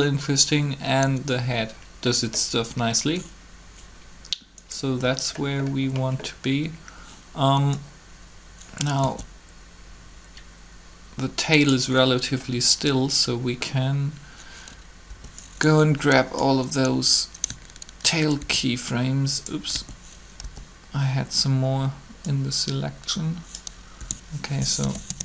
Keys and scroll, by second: 9.0 alt+a, 15.0 b, 18.4 shift+s, 19.7 a, 20.4 b, 24.0-25.2 typing.